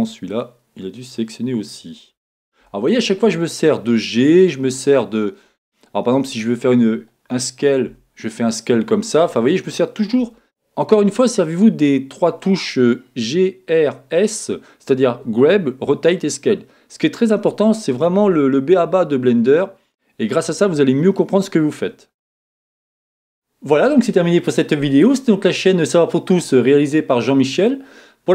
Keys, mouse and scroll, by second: 0.3 click, 3.3 g, 4.4 click, 4.9-6.3 middle drag, 6.3 click, 7.9 s, 10.3 Escape, 10.4-28.3 middle drag, 17.3-17.7 scroll up 2, 17.7-18.2 scroll down 2, 18.2-19.1 scroll down 1.